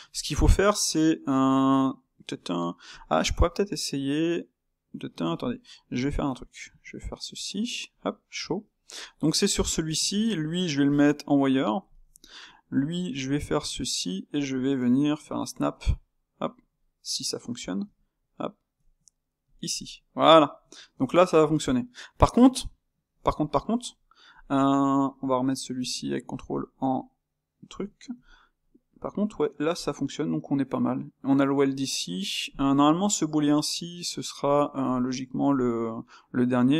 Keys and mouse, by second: 0.0 click, 2.9-5.9 shift+middle drag, 6.0-6.7 ctrl+middle drag, 7.9 shift+q, 8.9 click, 9.2 middle click, 11.0 shift+q, 11.5-12.7 middle drag, 12.7 click, 13.1 Tab, 14.4-17.8 middle drag, 17.8 g, 19.7-21.6 middle drag, 21.6 Tab, 22.6-24.3 shift+middle drag, 24.3 click, 26.3 shift+q, 26.9-28.8 ctrl+middle drag, 28.8 click, 33.0 ctrl+middle click, 33.9 click, 34.3 click.